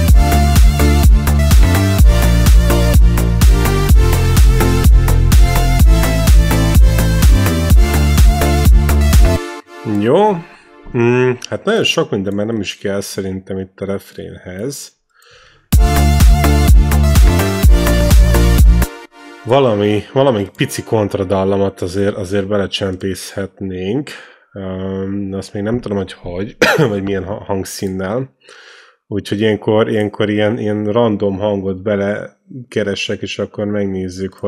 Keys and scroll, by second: 9.1 space, 15.5 space, 18.7 space.